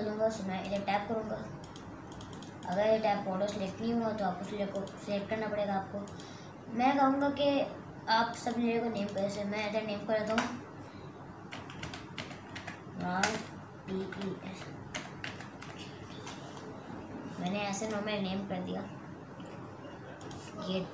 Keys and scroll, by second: 10.4-16.1 typing.